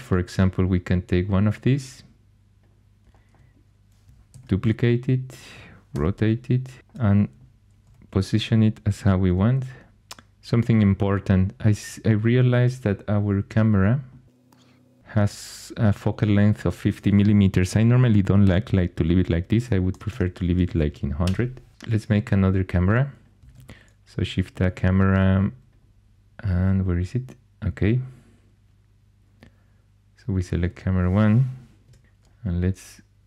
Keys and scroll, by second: 4.3 shift+d, 5.9 r, 7.8 r, 9.2 g, 19.4-20.5 typing, 21.2 Return, 23.4 shift+a, 31.8 0.